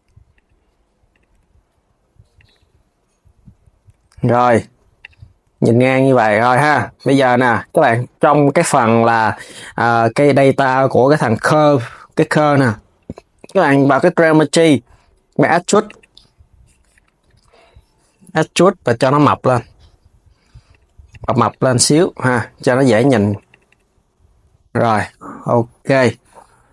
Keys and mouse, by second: 0.8 click, 1.1 g, 3.6 g, 4.7 click, 5.1 r, 5.8 Tab, 7.4 click, 13.6-18.6 drag, 20.4-24.1 drag, 24.1 KP_3, 24.7 click, 26.4 click.